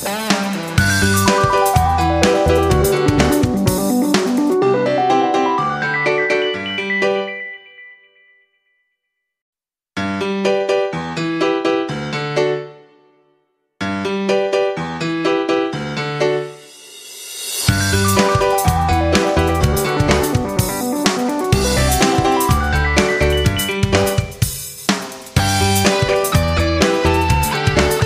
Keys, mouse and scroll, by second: 0.9 shift+click, 1.6 click, 7.6 ctrl+g, 8.6 shift+click, 9.3 shift+click, 15.3 ctrl+g, 16.9 click, 22.0 shift+Up, 22.1 shift+Right, 23.3 shift+Up, 23.6 shift+Right, 27.4 F9, 27.8 click.